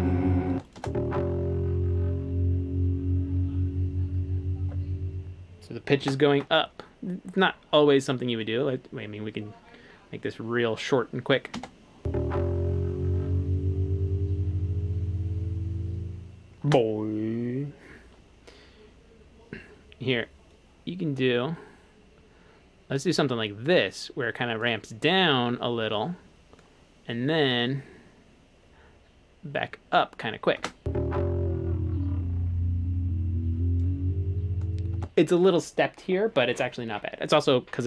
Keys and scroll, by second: 0.5 space, 6.0 space, 11.6 space, 16.7 space, 30.6 space, 35.0 space.